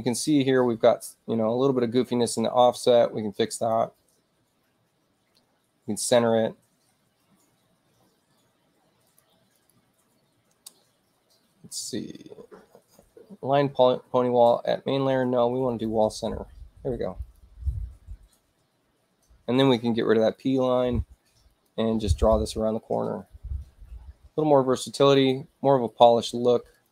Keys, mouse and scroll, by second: 3.5 click, 9.0 click, 9.4 click, 15.6 click, 17.1 click, 21.4 click, 22.2 click, 25.0 click, 26.6 click.